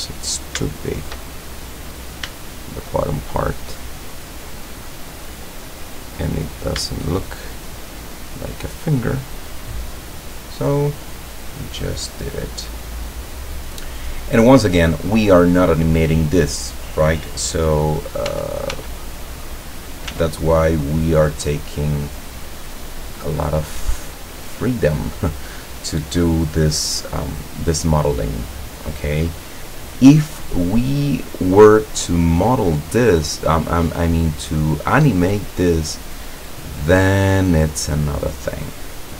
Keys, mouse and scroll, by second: 0.7 shift+middle click, 1.1 shift+middle click, 1.7 middle click, 2.6 shift+right click, 3.3-4.9 shift+drag, 5.2-6.1 middle drag, 6.5 right click, 6.9 shift+right click, 7.7-8.9 shift+drag, 9.1 scroll down 1, 9.8-10.2 middle drag, 10.9 scroll down 1, 11.4-12.7 middle drag, 12.7 scroll down 1, 13.3-14.2 middle drag, 14.2-14.7 scroll up 1, 14.9-15.9 middle drag, 18.3 l, 20.1 s, 22.4 click, 23.4-24.9 drag, 31.1 scroll up 2, 31.8 right click, 32.2-33.0 middle drag, 33.6-34.4 middle drag, 35.0-35.6 scroll up 2, 35.6 scroll up 1, 35.9-37.1 drag, 37.4-38.4 middle drag, 38.8-39.1 middle drag.